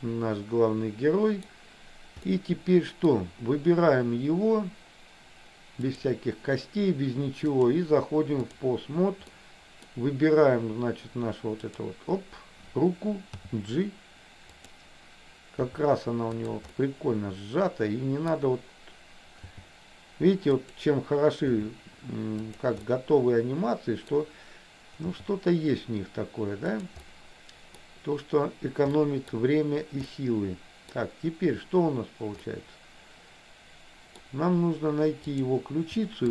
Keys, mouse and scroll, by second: 2.3 middle click, 6.0 click, 7.6-8.6 drag, 9.5 middle click, 11.9 click, 13.3 g, 15.7 r, 16.9-18.5 middle drag, 19.6 g, 21.6 r, 23.0-24.1 middle drag, 24.1 scroll down 1, 25.3 g, 27.1 middle click, 27.8 scroll down 1, 29.0 middle click, 30.2 middle click, 32.6-34.4 middle drag, 35.4 click.